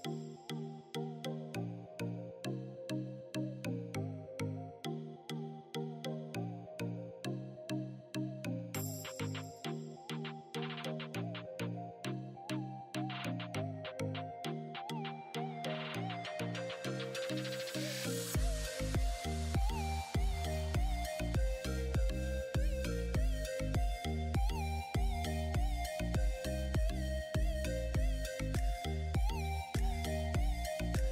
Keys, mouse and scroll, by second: 0.0 click, 0.9 alt+shift+click, 1.3 right click, 1.6 click, 1.7-2.2 scroll down 1, 2.4-3.0 scroll up 1, 3.0-5.9 drag, 6.8-7.2 scroll down 1, 8.1 click, 8.5-11.1 alt+drag, 11.7 right click, 13.0 click, 14.3 right click, 14.5 click, 15.4-16.4 scroll up 1, 18.4-19.2 scroll up 1, 19.2 click, 19.6 click, 20.6-25.0 drag, 25.0 click, 26.5 click.